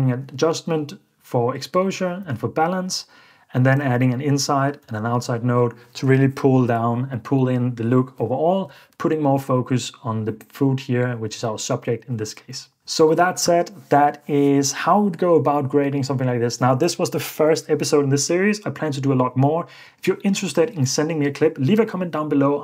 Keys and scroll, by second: 2.2 super+d, 3.8 super+d, 4.9 super+d.